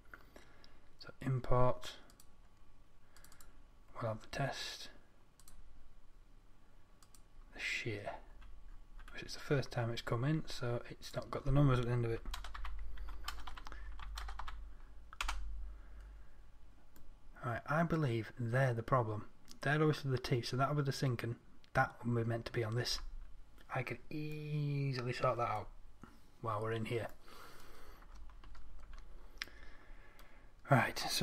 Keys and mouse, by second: 5.8 click, 7.6-13.4 drag.